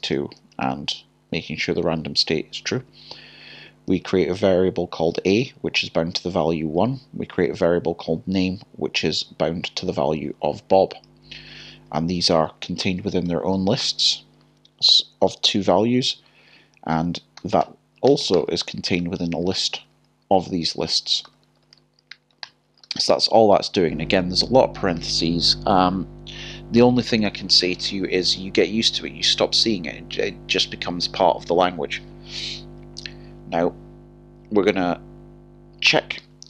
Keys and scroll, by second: 2.1 typing, 3.9 typing, 5.3 l, 10.2 typing, 11.3 typing, 13.2-13.8 typing, 18.3-19.0 typing.